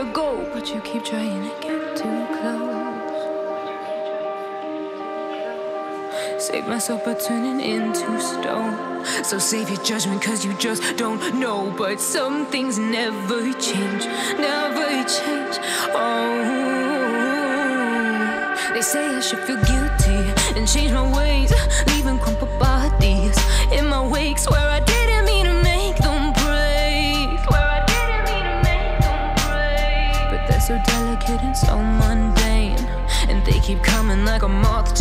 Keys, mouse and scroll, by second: 0.1 r, 1.0 z, 1.0 z, 1.1 Tab, 3.3-5.5 drag, 6.0 Tab, 7.0 r, 8.0 x, 8.5 Tab, 8.6 Tab, 8.8 Tab, 9.8 Tab, 10.3 a, 10.7 c, 16.1 g, 16.9 Tab, 17.5 Tab, 19.0 z, 19.2 z, 19.4 Tab, 20.2 ctrl+z, 20.3 ctrl+z, 22.5 middle click, 23.7 Tab, 25.3 Tab, 27.6 click.